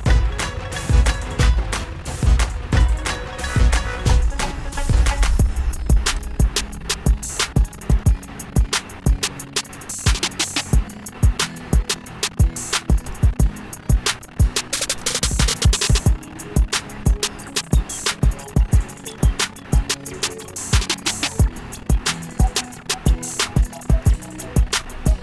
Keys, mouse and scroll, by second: 1.6 click, 2.7 click, 3.4 click, 6.5 click, 7.7 click, 8.2 click, 8.8-10.5 scroll, 11.5-13.4 scroll, 13.4 click, 14.8 click, 15.4 click, 15.9-16.4 scroll down 1, 19.4 click, 20.7 click, 22.6 click, 24.2 click.